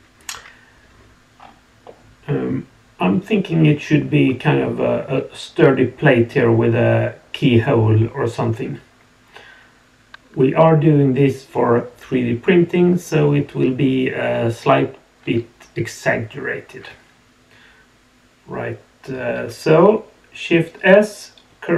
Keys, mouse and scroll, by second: 1.3-1.8 scroll down 2, 1.8-4.2 middle drag, 19.4 shift+s.